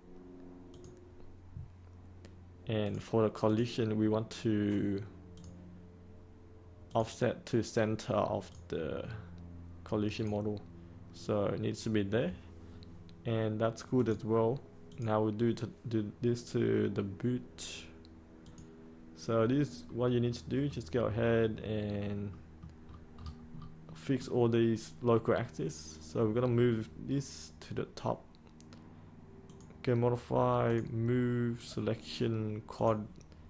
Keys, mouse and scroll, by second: 20.2 middle click, 22.8 scroll up 1, 23.8-25.1 middle drag, 29.4-33.4 drag.